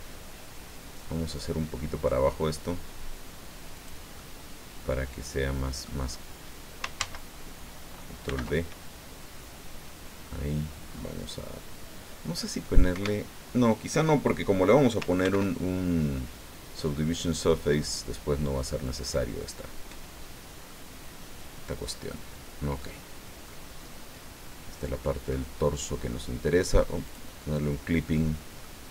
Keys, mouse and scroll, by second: 3.7 click, 4.0 middle click, 4.1-6.0 drag, 7.0 ctrl+z, 8.2 ctrl+b, 10.9-11.4 scroll up 2, 12.9 Escape, 15.2 ctrl+b, 18.8 click, 20.7-23.0 drag, 23.1 scroll down 2, 23.5-25.2 drag, 25.3 middle click, 27.0 click, 27.7 scroll down 1, 28.1 middle click.